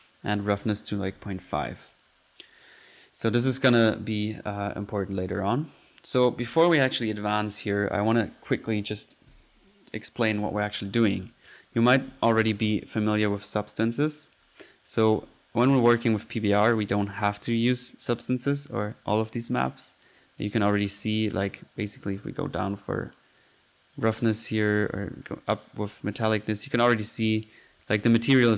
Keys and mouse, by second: 0.3-0.8 drag, 5.2 click, 7.0 click, 7.7 click, 7.9 click, 10.9-11.5 middle drag, 11.5 click, 11.9-13.1 typing, 13.3-13.7 drag, 15.3-15.7 drag, 16.1 drag, 18.1 drag, 19.8 drag, 20.6 click, 22.0-23.3 drag, 22.9-25.7 typing, 23.4-23.8 drag, 24.2-25.2 drag, 25.6-26.2 drag, 27.6 click, 28.1 click.